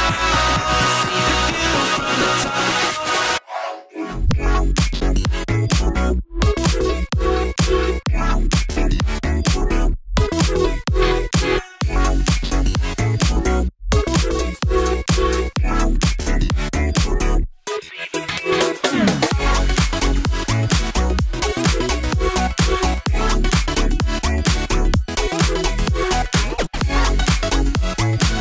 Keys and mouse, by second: 0.1 x, 1.7-3.2 drag, 4.5 click, 5.3 click, 6.4 click, 7.4 click, 8.8 s, 10.0 shift+middle click, 11.4 click, 12.5 shift+click, 13.2 click, 14.3 g, 17.0 click, 17.5 g, 18.6 click, 19.2 g, 22.1 ctrl+r, 23.5 ctrl+z, 23.5 click, 24.2 g, 26.1 `, 27.0 click, 27.9 click.